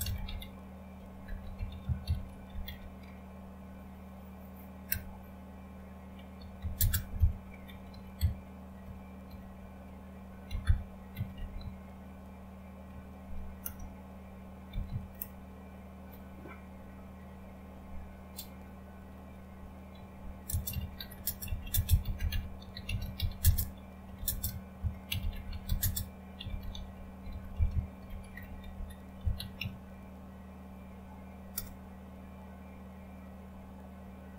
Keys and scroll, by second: 0.0-3.1 typing, 4.9 typing, 6.1-15.2 typing, 20.8-30.1 typing, 31.3-32.0 typing.